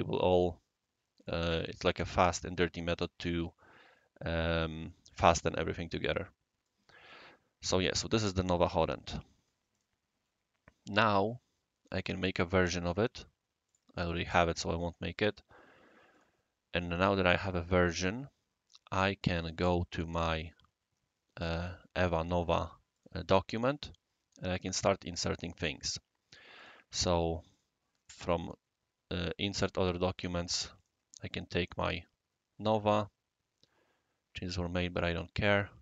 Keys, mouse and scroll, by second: 1.5 click, 5.5-6.7 right drag, 7.0-9.5 right drag, 9.7 click, 12.0 click, 13.6 click, 14.0 click, 16.1 click, 20.1 click, 22.9 click, 24.7 click, 26.5 click, 27.5 click, 30.8 click, 31.8 click, 34.5 click.